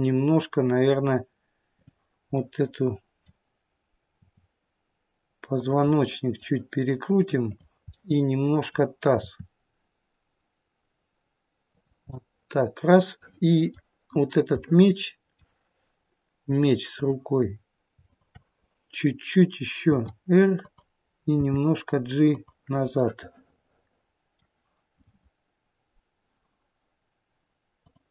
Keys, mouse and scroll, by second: 1.6 click, 2.2 middle click, 4.0 r, 5.7 middle click, 5.7-7.3 scroll up 1, 7.3 click, 7.9 middle click, 9.0 r, 11.9 middle click, 14.1 scroll down 2, 14.4 middle click, 16.8 click, 18.0 shift+click, 19.8 r, 21.3 g, 24.3 middle click, 27.8 click.